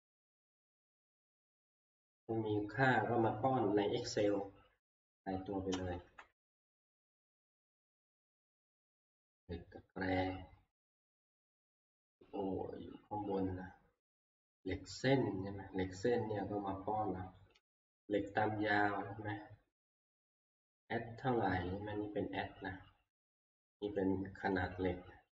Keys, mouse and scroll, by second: 4.1 click, 6.0 scroll down 1, 7.9 scroll down 1, 9.9 middle click, 9.9-10.4 scroll down 5, 10.4 Down, 10.4 scroll, 11.7-12.8 scroll, 14.6 click, 15.4-19.6 drag, 21.4 click, 24.0 click, 24.6 click.